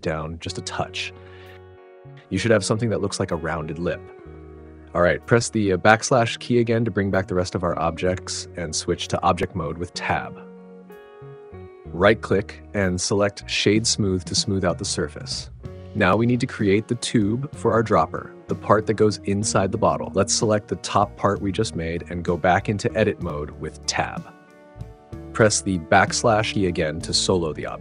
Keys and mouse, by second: 0.0 z, 1.5 click, 4.7 /, 8.7 Tab, 10.6 click, 13.1-14.1 drag, 22.2 Tab, 25.4 /.